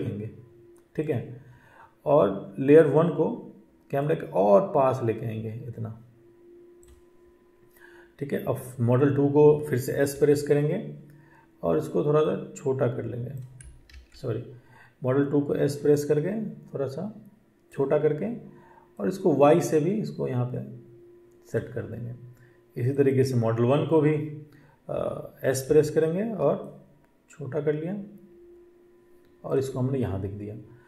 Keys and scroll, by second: 10.0 s, 13.7 ctrl+z, 25.6 s.